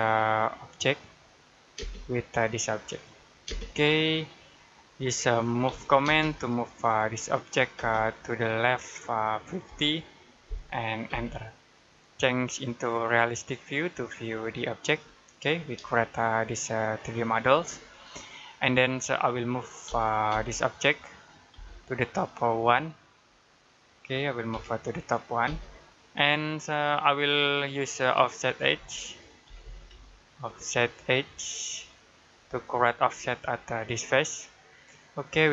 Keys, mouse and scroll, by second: 0.7 click, 1.6 space, 2.7 click, 3.3 space, 3.6 scroll down 1, 4.4 middle click, 5.5 m, 5.9 space, 7.2 click, 7.6 space, 7.8 click, 9.5 typing, 10.9 space, 13.6 click, 15.4 scroll down 1, 15.8 shift+middle click, 17.5-17.8 scroll up 1, 18.4 middle click, 20.1 space, 20.9 click, 21.4 space, 21.6 click, 24.4 1, 25.3 space, 26.7 middle click, 32.0 click, 32.6-33.7 scroll up 1, 33.7 click.